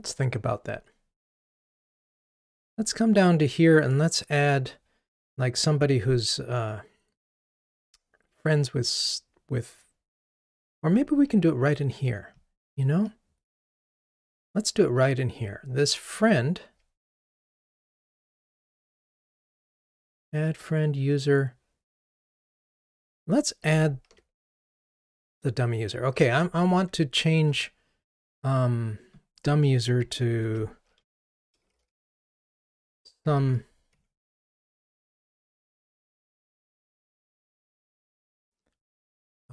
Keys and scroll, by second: 17.2 super+b, 30.4 shift+F6, 34.1 Delete.